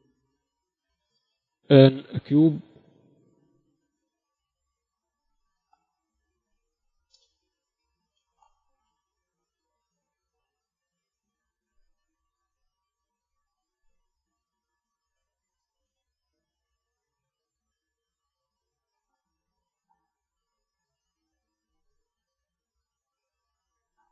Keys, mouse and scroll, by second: 1.7 click, 1.8 shift+a, 5.3 s, 6.9 s, 8.4 Tab, 9.0 a, 9.6 b, 11.7-13.5 drag, 12.8 a, 13.5 b, 14.5-16.4 drag, 16.7 a, 17.5 a, 18.2-19.2 drag, 20.3 KP_7, 23.7-24.1 drag.